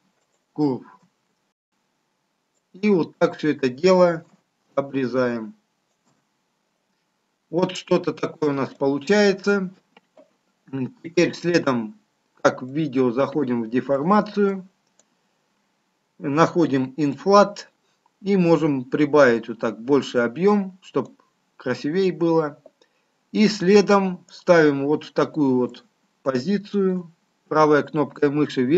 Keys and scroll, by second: 4.2 ctrl+shift+space.